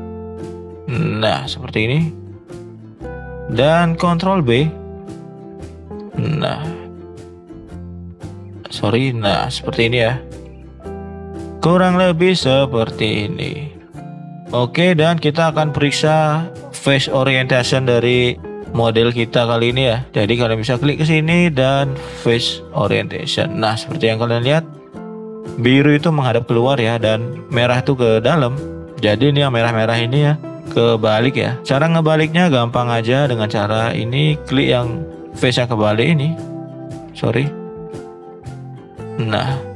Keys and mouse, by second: 0.4 alt+shift+click, 1.2 alt+shift+click, 2.0 alt+shift+click, 2.7 middle click, 4.0 ctrl+b, 10.6-12.0 middle drag, 12.6 middle click, 13.3 shift+middle click, 15.2 shift+middle click, 15.8 middle click, 16.3 click, 16.7 middle drag, 18.3-19.0 middle drag, 19.4 middle drag, 19.9 shift+middle click, 20.7-22.6 drag, 22.9 middle click, 24.3 middle click, 24.9 middle click, 26.6 middle drag, 28.4 middle drag, 29.1 shift+middle drag, 31.5 click, 31.8-33.2 middle drag, 33.4 click, 33.9 shift+drag, 34.1 middle drag, 34.6 shift+middle drag, 35.1-35.5 middle drag, 35.9 shift+click, 37.2 ctrl+z, 38.3 shift+click, 39.5 middle drag.